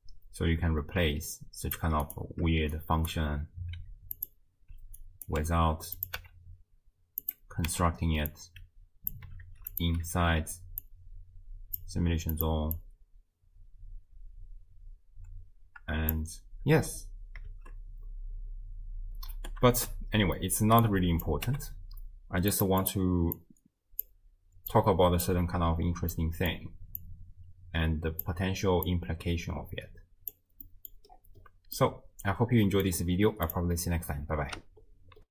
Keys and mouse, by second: 2.7-3.4 shift+drag, 3.8 g, 5.0 ctrl+click, 6.0 click, 6.2 n, 7.7 n, 8.3-9.1 drag, 9.5 ctrl+x, 9.7 click, 10.2 ctrl+x, 10.8-11.9 drag, 12.4 click, 12.8-16.2 drag, 16.7 space, 17.6 shift+space, 19.4 space, 20.4 click, 20.8 click, 21.5 g, 22.8 click, 23.4 click, 24.7 click, 26.2 middle click, 27.0-28.3 drag, 28.9-30.4 drag, 30.7 middle click, 30.8 click, 31.8-32.8 drag, 33.5 click.